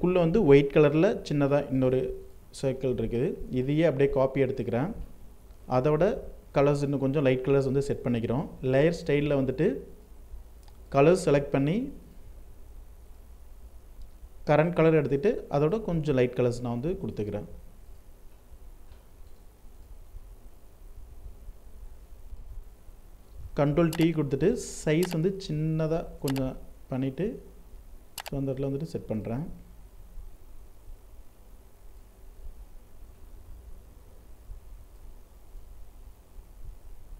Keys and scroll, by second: 22.2 ctrl+t.